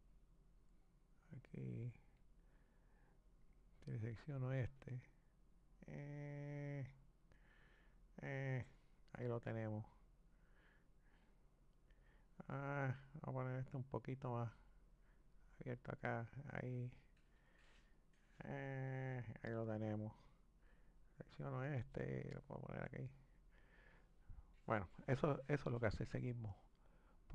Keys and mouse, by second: 4.0 click, 4.9 click, 9.5-12.5 middle drag, 12.9 click, 14.8 click, 18.4-21.0 middle drag, 21.0 click, 21.9 click, 26.8-27.3 drag.